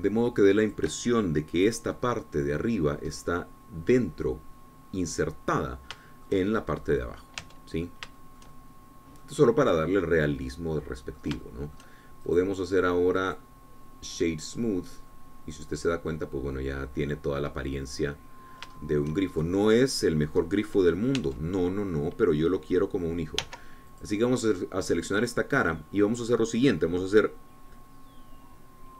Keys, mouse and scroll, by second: 1.7 shift+click, 4.2-6.8 drag, 6.8 scroll down 2, 7.1 shift+click, 7.1 shift+middle click, 8.0 middle click, 8.6 Tab, 8.9-9.3 scroll down 1, 9.3-12.4 shift+middle drag, 12.5 shift+middle click, 15.2 click, 15.9 scroll down 2, 16.2-20.5 drag, 20.5-21.0 shift+scroll up 3, 21.5 click, 22.3 Tab, 24.5 3, 25.1-26.4 drag, 26.4-27.6 middle drag.